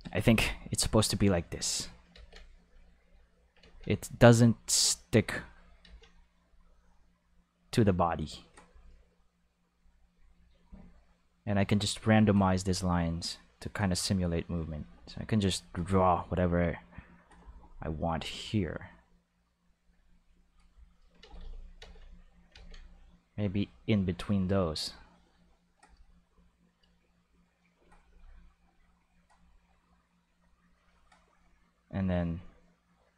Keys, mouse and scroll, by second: 0.2 ctrl+z, 0.9 click, 2.1 ctrl+z, 2.6 click, 3.6 ctrl+z, 4.0 click, 5.1 click, 5.8 ctrl+z, 6.2 click, 7.2 click, 8.2 click, 9.7 click, 10.4 click, 10.9 click, 11.6 click, 13.1 click, 14.6 click, 15.5 click, 16.3 click, 17.1-19.0 drag, 19.5 click, 20.1 click, 21.2 ctrl+z, 21.3 ctrl+z, 21.7 ctrl+z, 22.5 ctrl+z, 23.3 click, 24.2 click, 25.1 click, 27.6 click, 28.8 click, 30.2 click, 32.0 click, 33.0 click.